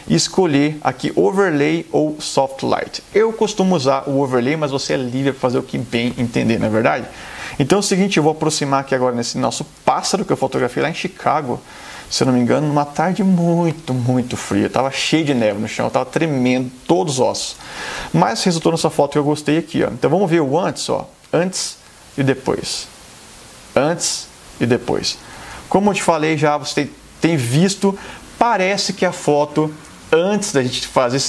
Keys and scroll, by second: 9.8 super+=, 12.0 super+=, 13.5 space, 25.6 super+-, 27.1 space.